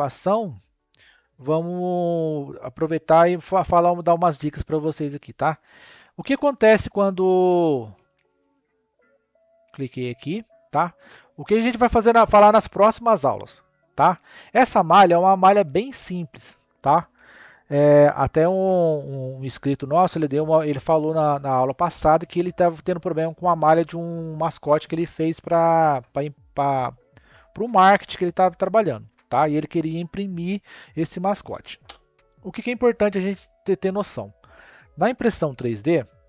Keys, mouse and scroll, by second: 4.3 scroll down 1, 5.6 ctrl+z, 6.0 ctrl+z, 6.8 ctrl+z, 7.0 ctrl+z, 7.4 ctrl+z, 7.9 ctrl+z, 8.1 ctrl+z, 8.3 ctrl+z, 9.2 click, 9.9 click, 15.9 click, 35.5 n.